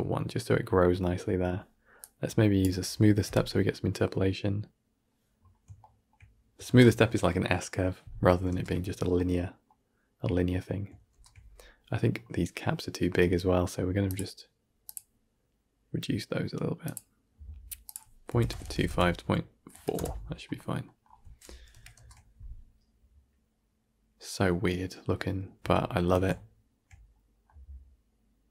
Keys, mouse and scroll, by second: 1.9-3.1 drag, 3.1 shift+Left, 5.3-5.7 scroll down 6, 5.7-6.6 shift+middle drag, 6.6 shift+space, 8.4 shift+space, 9.1-11.0 middle drag, 11.0 shift+space, 14.1-20.7 drag, 20.7 middle click, 21.6 shift+Left, 21.8 shift+space, 25.0-27.3 middle drag.